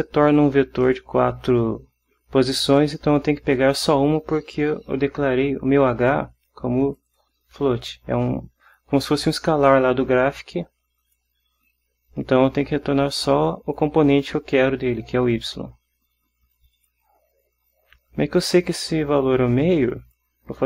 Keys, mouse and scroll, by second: 0.2 click, 6.2 click, 7.1 click, 11.2 click, 13.2 click, 16.9 click, 18.7-20.5 drag.